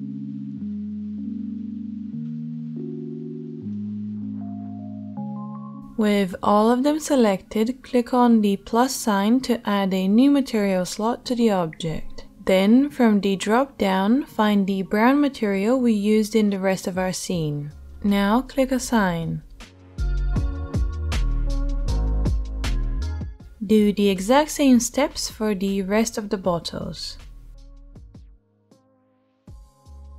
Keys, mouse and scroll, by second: 3.4 middle click, 3.7-21.0 ctrl+middle drag, 4.8 KP_3, 14.0 o, 21.0 Tab, 21.9-30.1 drag, 30.0 KP_3.